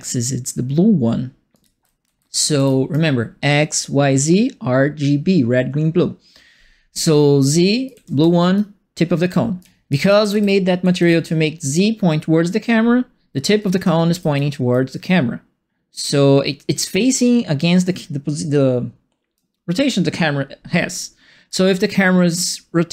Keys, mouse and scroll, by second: 1.3-3.0 typing, 1.5-2.9 right drag, 7.6-11.4 typing, 7.8 right click, 9.5-11.2 right drag, 13.4-14.3 typing, 13.6-19.3 right drag, 21.5-22.9 right drag.